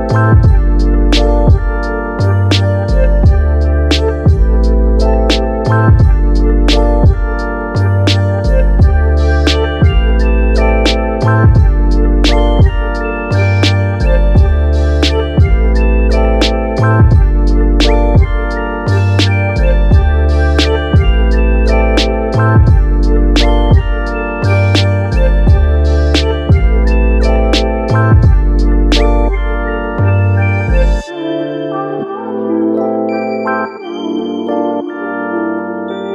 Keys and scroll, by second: 13.9 super+s, 14.7-17.2 typing, 18.7 Return, 32.9 space, 34.2 space.